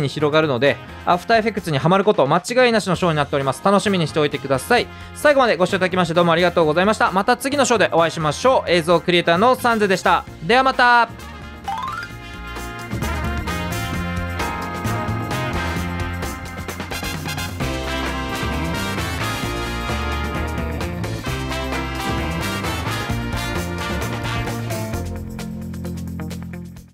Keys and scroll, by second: 0.0 typing, 4.9 space, 7.2 space.